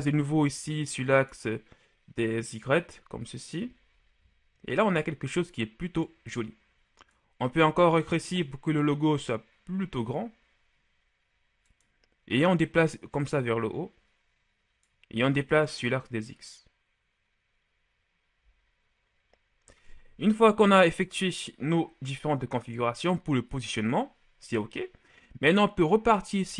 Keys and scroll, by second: 7.6 s, 20.9 Tab.